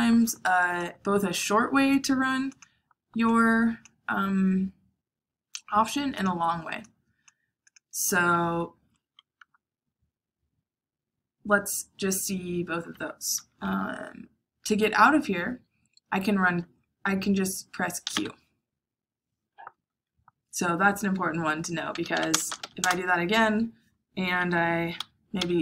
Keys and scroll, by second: 18.0 q, 21.6-23.0 typing, 24.5-25.2 typing, 25.3 Escape.